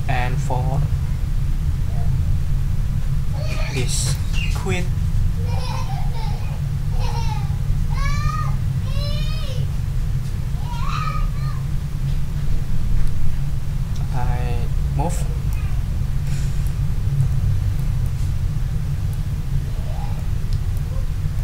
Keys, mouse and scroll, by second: 4.1-15.7 drag, 16.2 click, 17.3 click, 18.0 click.